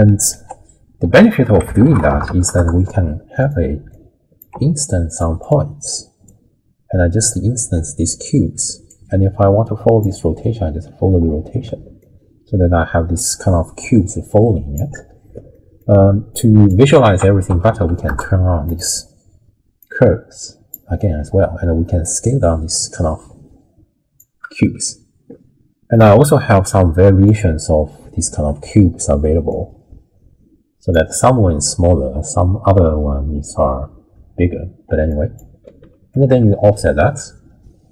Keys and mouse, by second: 0.3 ctrl+a, 3.9 click, 4.5 g, 5.4 click, 6.3-7.3 drag, 8.9-10.0 drag, 12.0-14.8 shift+drag, 15.6 middle click, 16.3 click, 17.1 ctrl+a, 19.8-20.7 drag, 22.0-24.2 shift+drag, 24.6 middle click, 26.0-27.3 drag, 29.5-30.9 shift+drag, 35.2 click, 36.1-37.9 shift+drag.